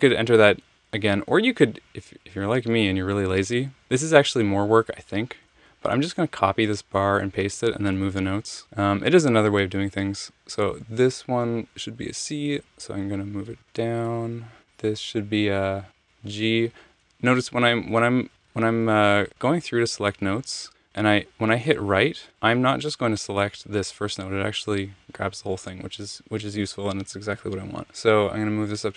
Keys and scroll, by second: 2.1 Escape, 5.5 super+c, 8.1 super+v, 13.2 alt+Down, 13.4 alt+Down, 14.6 Right, 17.5 Left, 17.9-18.4 Left, 18.4 Right, 19.8 Left, 24.7 Right, 28.8 alt+Up.